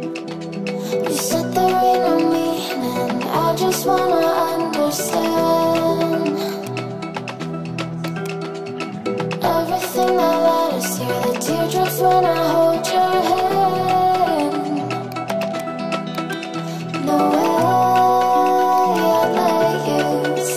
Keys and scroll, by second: 3.4 shift+Page_Up.